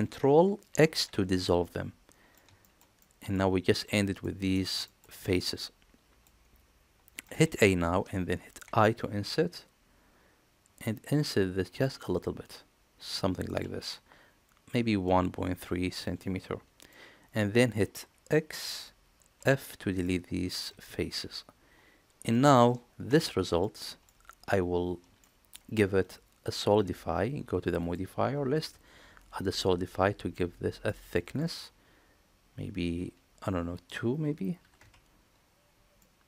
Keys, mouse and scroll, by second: 0.5 ctrl+x, 1.4 middle click, 2.4 middle click, 2.8 middle click, 4.0 middle click, 4.7 shift+middle click, 5.0-6.1 middle drag, 7.1 middle click, 7.3 a, 8.5 i, 16.0 middle click, 16.4 click, 18.4 x, 19.8 click, 20.6 shift+drag, 22.1 middle click, 22.9 Tab, 23.4 middle click, 25.1 shift+middle click, 27.6-29.4 drag, 30.1-30.7 middle drag, 31.0 shift+middle drag, 33.5-35.4 drag, 35.8-36.2 middle drag.